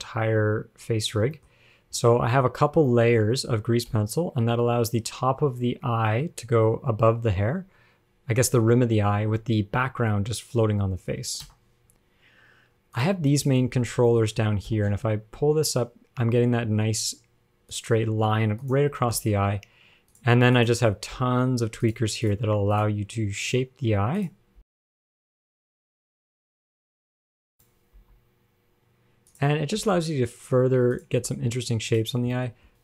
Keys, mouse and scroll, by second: 0.0 shift+middle click, 0.0 click, 1.4 scroll down 1, 1.6 shift+middle click, 1.9 scroll up 1, 2.0 scroll down 3, 2.2 middle click, 2.7-3.0 scroll up 4, 3.0 middle click, 4.2 g, 11.7 KP_1, 13.2 click, 13.8-14.3 scroll down 3, 14.3 shift+middle click, 14.4 scroll up 2, 14.9 g, 18.8 click, 19.5 g, 20.8 click, 21.5 g, 22.5 click, 24.4 click, 25.1 g, 27.0 click, 27.8 click, 28.5 g, 30.0 g, 31.1 click, 31.8 g, 32.6 shift+middle click, 32.7 scroll up 5.